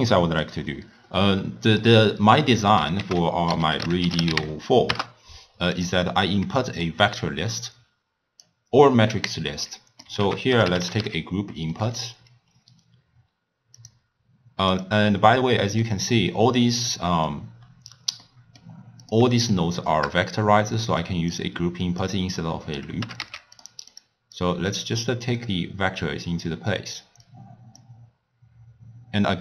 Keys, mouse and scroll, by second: 3.0 ctrl+a, 6.0-6.6 scroll up 1, 6.6-7.6 middle drag, 7.6-9.7 drag, 9.7 middle click, 10.2 ctrl+a, 15.2-16.2 middle drag, 16.2 scroll up 1, 16.3 scroll down 3, 16.5-17.6 scroll up 3, 17.6-18.3 scroll down 4, 18.3-19.0 middle drag, 19.0 click, 19.4 shift+click, 19.8 shift+click, 20.8 middle click, 21.4 click, 22.5 click, 23.0 g, 24.0 drag, 24.4 click, 25.5 drag, 27.2 drag.